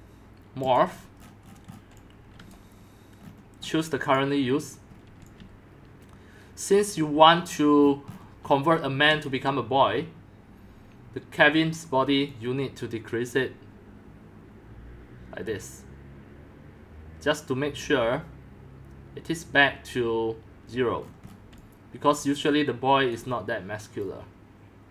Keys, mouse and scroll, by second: 0.6 scroll up 1, 0.6 scroll down 10, 0.7 click, 1.3-1.9 scroll down 16, 1.9 x, 2.3 scroll, 2.5 click, 3.2 scroll, 3.2 scroll down 1, 3.4 scroll down 1, 3.5 scroll down 1, 3.6 scroll down 1, 3.8 scroll down 1, 3.8-4.1 scroll down 1, 4.1-5.0 drag, 5.0-6.2 middle drag, 5.0 scroll, 5.2-23.2 typing, 7.0 click, 7.8 middle click, 7.9-8.8 scroll up 17, 9.0 scroll, 9.6-14.3 drag, 17.7-21.0 drag, 21.0 scroll down 2, 21.2-22.7 middle drag, 21.2-21.6 scroll, 23.2-24.9 drag.